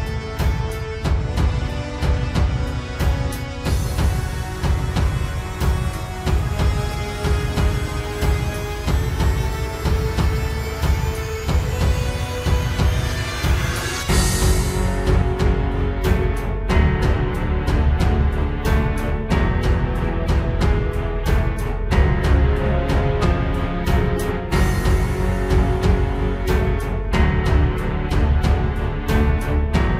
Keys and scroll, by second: 0.5 ctrl+j, 3.8 ctrl+t, 4.0 ctrl+space, 4.4 ctrl+space, 5.1 ctrl+j, 5.6 ctrl+t, 6.5 ctrl+t, 7.7 ctrl+t, 8.8 ctrl+t, 9.1 ctrl+space, 9.6 ctrl+space, 10.1 ctrl+space, 12.3 ctrl+space, 15.0 ctrl+space, 15.5 ctrl+s, 16.1 ctrl+space, 18.4 ctrl+i, 19.0 ctrl+space, 19.6 ctrl+space, 20.3 ctrl+space, 23.5 ctrl+space, 24.5 ctrl+space, 25.0 ctrl+space, 26.6 ctrl+d, 26.8 ctrl+space, 27.6 ctrl+space, 27.8 ctrl+s, 28.3 ctrl+space.